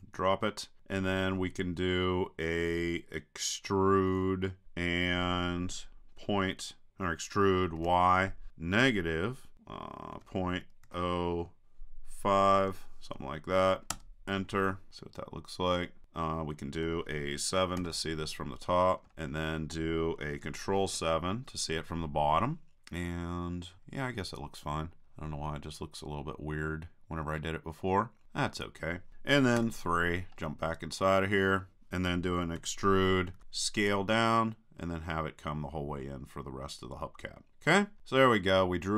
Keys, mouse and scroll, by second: 0.0-1.6 drag, 4.6 e, 14.9-16.0 drag, 17.8 KP_7, 19.1 middle click, 20.4 click, 20.9 ctrl+KP_7, 22.7 middle click, 23.8-27.0 middle drag, 29.6 KP_3, 30.4 middle click, 32.6 e, 37.5 click, 38.0 middle click, 38.2-38.9 middle drag.